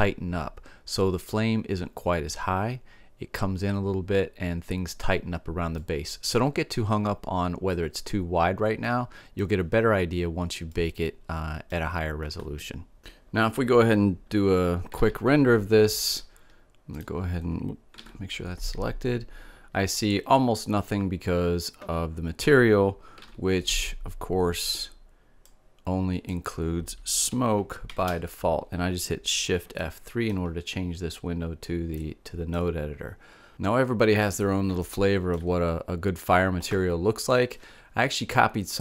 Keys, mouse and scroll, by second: 5.3-7.7 middle drag, 8.3-12.0 middle drag, 18.2 shift+z, 23.3 shift+z, 25.4-26.5 drag, 27.8 shift+F3, 33.5-34.8 middle drag.